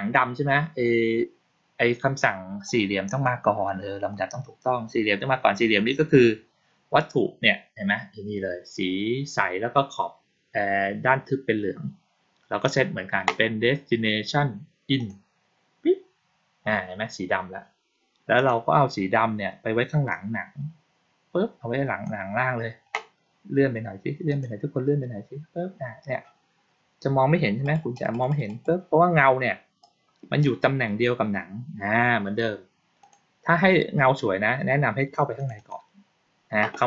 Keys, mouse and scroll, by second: 2.6 click, 3.1-4.0 drag, 12.5 click, 14.9 click, 18.3 click, 20.0-21.9 drag, 24.2 click, 27.5 click, 27.9 click, 28.0 click, 28.2 click, 28.4 click, 29.7-30.3 drag, 32.9 click, 35.3 click, 35.5 click.